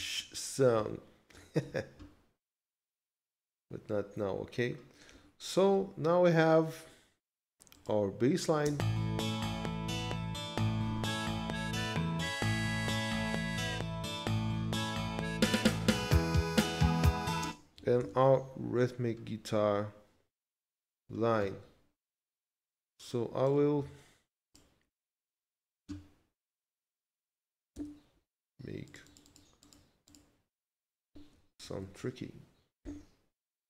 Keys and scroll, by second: 1.6 ctrl+s, 8.7 space, 9.8 ctrl+s, 11.6 ctrl+Left, 13.3 ctrl+s, 17.5 space, 18.0 ctrl+s, 27.8 d, 31.6 ctrl+Left.